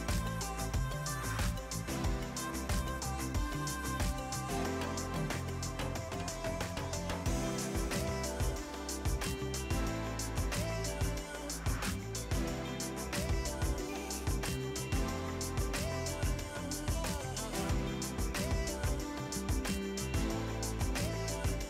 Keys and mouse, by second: 2.4 ctrl+shift+x, 2.5 click, 3.0 KP_1, 3.2 Return, 4.0 click, 7.0 right click, 7.5 click, 8.7 s, 8.9 ctrl+click, 9.3 KP_0, 9.6 Return, 9.9 click, 10.2 s, 10.5 ctrl+click, 10.7 KP_1, 11.0 Return, 11.8 click, 12.1 s, 12.6 KP_1, 12.7 Return, 12.9 click, 13.2 s, 13.4 click, 14.4 ctrl+click, 14.7 KP_1, 14.8 Return, 15.1 click, 15.8 Delete, 17.0 click, 20.4 click, 21.0 KP_5, 21.1 Return.